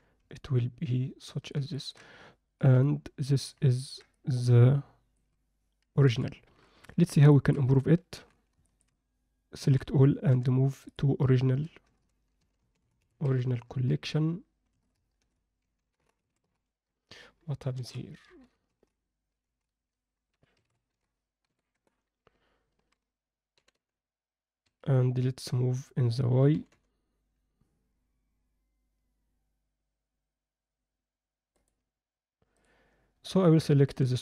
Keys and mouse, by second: 0.3-1.5 alt+middle drag, 1.7 ctrl+middle click, 2.6 KP_7, 3.7 ctrl+alt+middle click, 4.1-5.1 alt+middle drag, 6.1 KP_7, 6.9 alt+shift+middle drag, 7.3 ctrl+alt+middle click, 8.1 alt+h, 8.7 alt+shift+middle drag, 9.6 a, 10.3 m, 23.5 g, 26.5 g, 32.5 click.